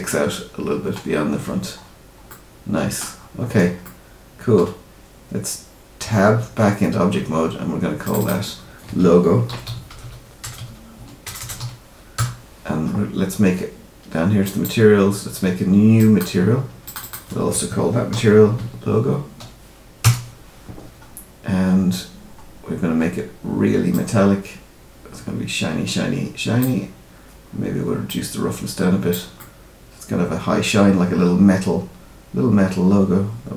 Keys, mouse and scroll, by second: 1.0-2.2 scroll up 7, 2.2 middle click, 3.1-3.8 scroll down 6, 3.8 middle click, 6.0 Tab, 8.0 click, 8.1 click, 11.3 BackSpace, 14.4 click, 15.9 click, 16.8 click, 21.9-22.4 scroll down 2, 23.0-23.9 scroll down 2, 23.9 click, 27.2-28.0 scroll down 2, 28.0 click, 29.3 middle click.